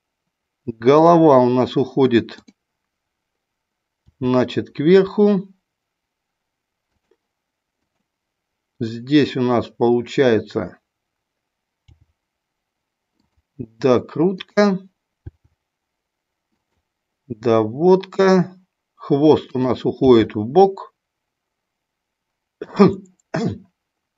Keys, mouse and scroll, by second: 1.1 click, 2.3 click, 4.1 r, 6.9 click, 7.8 click, 11.8 g, 14.3 click, 15.2 g, 19.9 g.